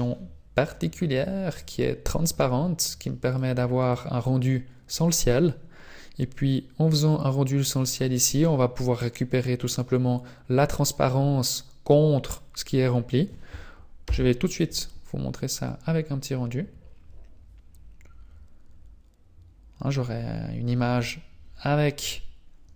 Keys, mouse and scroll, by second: 1.6 click, 3.3 click.